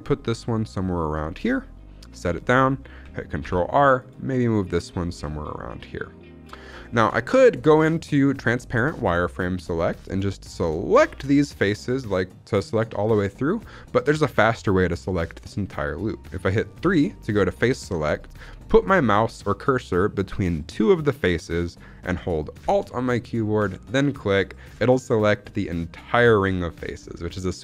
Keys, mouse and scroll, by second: 1.3 click, 3.3 ctrl+r, 6.5 click, 6.8 shift+middle click, 7.1-7.6 scroll up 2, 7.8 shift+middle click, 13.6 shift+middle click, 14.0-14.4 scroll up 1, 17.1 3, 23.8 alt+click, 27.0 scroll down 3, 27.3-27.6 shift+middle drag.